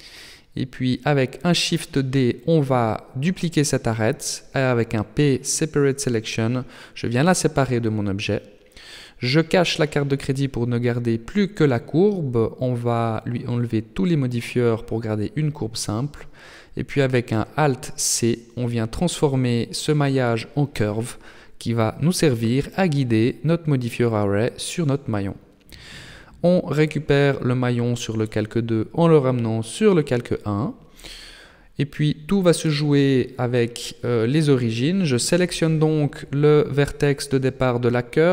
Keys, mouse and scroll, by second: 1.0 shift+right click, 3.8 shift+d, 5.1 p, 6.9 Tab, 7.8 right click, 8.8 h, 9.8 right click, 12.1 click, 13.2 click, 14.0 click, 15.9 alt+c, 18.0 Tab, 22.8 Tab, 25.0 click, 26.0 right click, 27.1 m, 30.7 click, 31.7 n, 33.7 right click, 34.2 Tab, 34.8 right click, 38.1 shift+s.